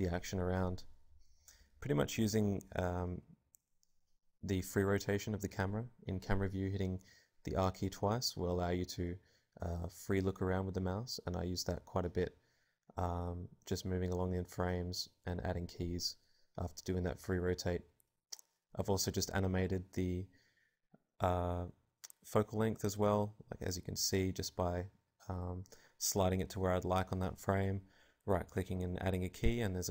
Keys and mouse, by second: 11.1-13.1 drag, 15.2 ctrl+z, 15.7-17.6 drag, 20.3-22.0 drag, 22.0-23.1 middle drag, 23.1 right click, 24.0-25.8 drag, 26.3 ctrl+z, 27.3 ctrl+z, 27.7-29.6 drag.